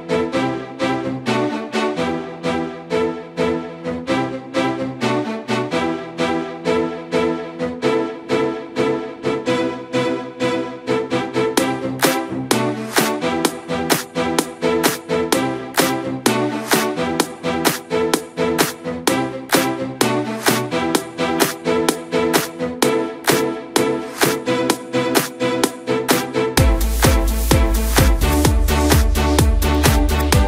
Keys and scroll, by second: 24.1 Return.